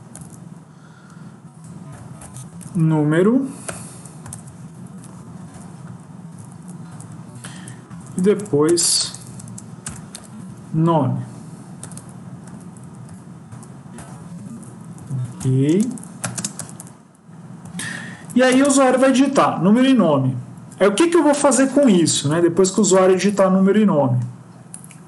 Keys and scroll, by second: 4.8 End, 6.1 ctrl+c, 6.4 Down, 6.7 Down, 7.3 ctrl+v, 7.8 Up, 8.0 ctrl+Left, 8.5 Right, 8.9 BackSpace, 12.7 Up, 13.0 Up, 13.3 Left, 14.2 Down, 22.2 Up, 22.5 Tab, 22.8 Tab, 23.0 Tab, 23.1 Tab.